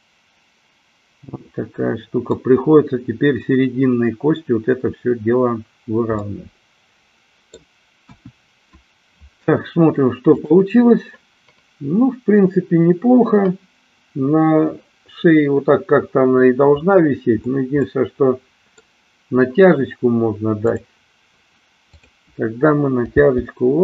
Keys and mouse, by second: 6.2-7.7 middle drag, 8.1 KP_1, 10.3 click, 17.8-18.8 middle drag, 20.7 click, 22.0-23.0 drag, 23.2 g.